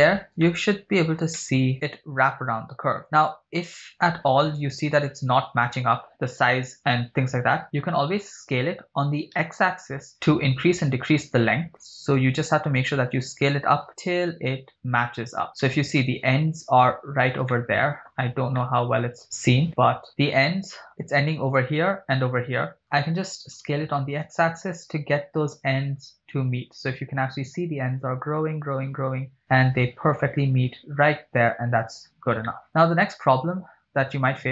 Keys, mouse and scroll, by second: 0.0-0.3 scroll up 2, 0.3-1.1 shift+middle drag, 1.5-3.4 middle drag, 3.6-4.0 scroll up 5, 3.9 middle drag, 4.7-5.3 scroll down 4, 6.1 middle click, 8.2 s, 9.5 x, 15.5 shift+click, 15.7-16.8 middle drag, 17.1 scroll up 2, 17.5-18.1 shift+middle drag, 18.1 scroll up 3, 18.6 middle click, 20.1 middle click, 22.8 shift+right click, 22.8 scroll down 1, 23.6 s, 23.8 x, 31.5 shift+click, 32.1 scroll down 2, 32.6-34.2 middle drag.